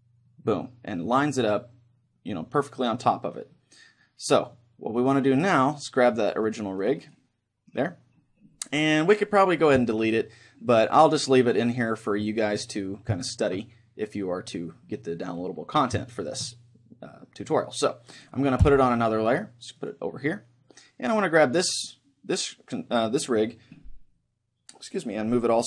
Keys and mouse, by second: 0.7-3.2 middle drag, 3.6-5.5 middle drag, 5.0-8.8 right drag, 11.1-13.0 middle drag, 13.2-15.4 middle drag, 16.1-18.6 middle drag, 18.6 m, 21.2-22.8 right drag, 21.6-25.2 middle drag.